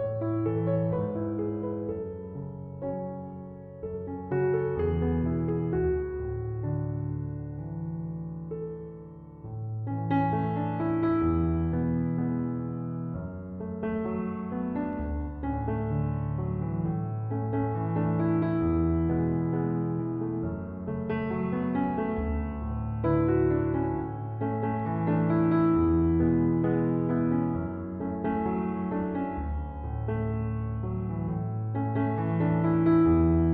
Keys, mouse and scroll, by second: 2.1 ctrl+7, 12.8 1, 13.3 Return.